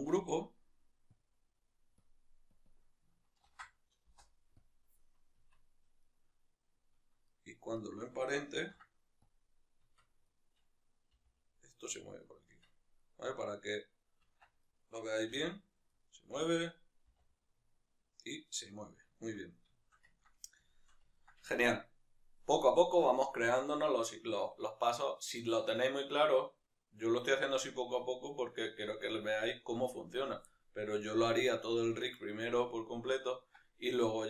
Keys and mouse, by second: 0.2 a, 2.1 click, 4.1-6.0 drag, 4.2 Return, 5.6 Tab, 6.0-9.4 right drag, 9.4 ctrl+p, 10.0 Tab, 10.3 right click, 11.2 g, 12.2 right click, 12.6 Tab, 13.0 right click, 13.4-14.5 right drag, 14.5 Tab, 14.6-15.4 right drag, 15.4 g, 16.4 right click, 17.2 r, 18.6 right click, 19.2-34.2 shift+middle drag.